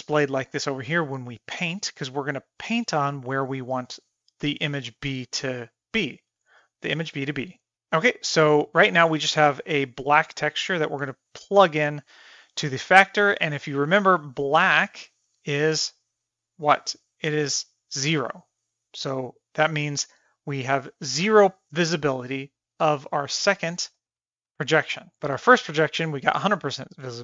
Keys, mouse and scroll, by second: 9.6-10.4 drag, 11.3-16.3 drag, 18.6-20.7 middle drag, 21.2 middle drag, 21.8 middle drag, 22.6-23.0 middle drag, 23.3 click, 24.1 Tab, 24.4 click, 24.5 g, 26.4 shift+middle click, 26.7-27.1 middle drag.